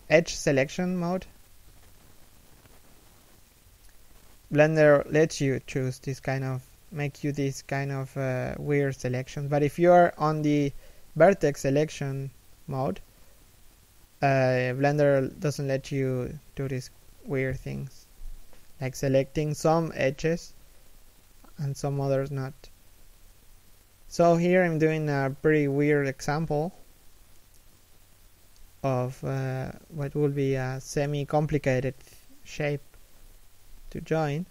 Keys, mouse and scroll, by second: 0.3 Tab, 0.6 shift+middle click, 2.3 g, 3.3 a, 3.7 alt+right click, 4.8 alt+shift+middle click, 5.3 ctrl+click, 7.3 shift+middle click, 7.8-8.2 scroll down 1, 8.2 ctrl+click, 10.1 shift+middle click, 10.8 ctrl+click, 11.8 scroll down 1, 11.9 a, 12.3 alt+shift+middle click, 12.7 a, 13.6 l, 14.0 shift+d, 15.5 g, 16.0 s, 16.8 g, 17.5 a, 19.8 alt+right click, 22.3 alt+shift+right click, 23.0 alt+shift+middle click, 23.5-23.9 scroll up 2, 23.9 alt+shift+middle click, 24.2-24.6 alt+shift+scroll down 1, 24.6-25.3 scroll up 1, 25.8 3, 26.2 1, 26.8-27.2 scroll down 1, 27.2 shift+middle click, 31.4 alt+right click, 33.6 alt+shift+right click.